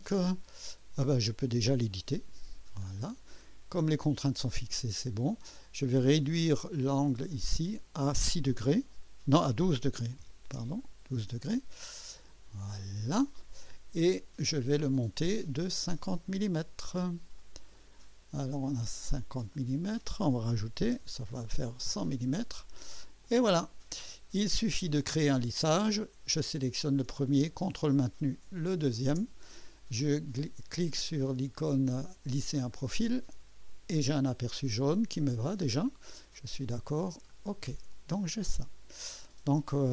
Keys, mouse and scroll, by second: 1.9 click, 2.9 scroll up 2, 3.4 right click, 3.5 middle click, 4.1 scroll up 1, 4.7 middle click, 7.3 click, 10.0 KP_1, 10.4 KP_2, 10.7 Return, 12.6 click, 13.6 click, 14.8 click, 17.3 click, 17.9 click, 19.5 click, 20.9 KP_1, 21.2 KP_0, 21.8 Return, 23.2 click, 24.1 click, 25.2 typing, 25.9 click, 26.5 typing, 28.6 ctrl+click, 32.7 click, 34.0-36.7 drag, 37.3 click, 38.2-39.5 drag, 39.7 scroll up 1.